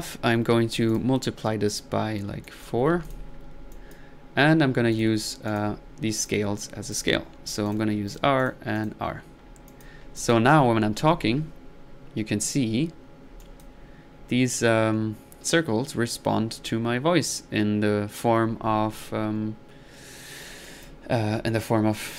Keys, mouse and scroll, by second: 0.9 click, 1.7 drag, 2.4 click, 3.0 drag, 3.5 middle click, 3.7-4.3 drag, 4.3-4.9 middle drag, 4.9 drag, 5.5 drag, 6.2 click, 7.7 click, 8.1-9.2 drag, 9.7-10.1 drag, 9.7-10.1 typing, 10.2 click, 13.4-13.8 drag, 14.0 click, 16.1 typing, 20.7-21.1 drag, 21.3 middle click.